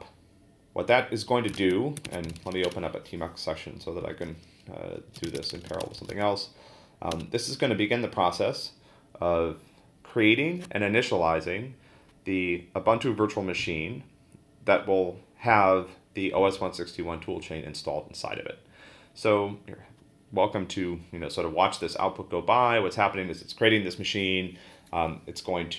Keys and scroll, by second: 0.0-0.1 typing, 1.5 ctrl+l, 2.0-3.0 typing, 4.9-6.6 typing, 7.1 Return.